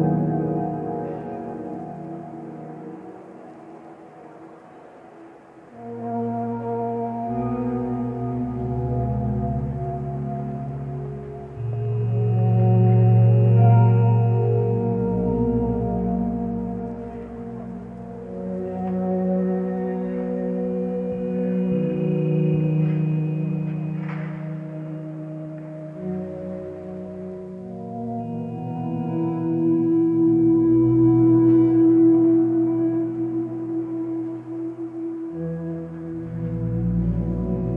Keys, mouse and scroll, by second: 19.6 ctrl+space, 24.2 ctrl+z, 30.7 ctrl+alt+shift+e.